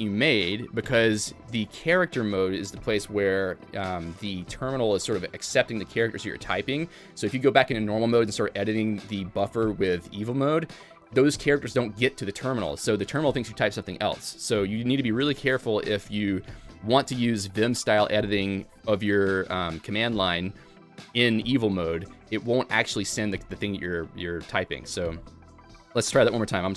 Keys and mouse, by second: 16.1 Escape, 24.7 a, 26.1-26.7 g.